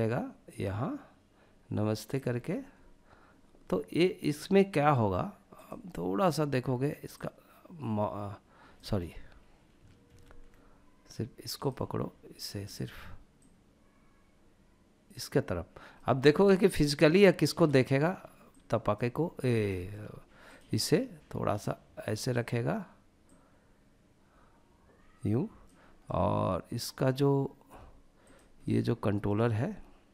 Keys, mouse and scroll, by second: 4.6 click, 6.2 click, 6.5 click, 9.3 ctrl+z, 10.6 drag, 11.7 click, 12.5 click, 15.1-16.7 middle drag, 17.6 click, 18.6 scroll up 1, 18.9 shift+middle click, 19.6 click, 20.8 click, 22.4 click, 25.1-26.8 middle drag, 27.3 click, 27.7-28.4 middle drag, 29.6 g.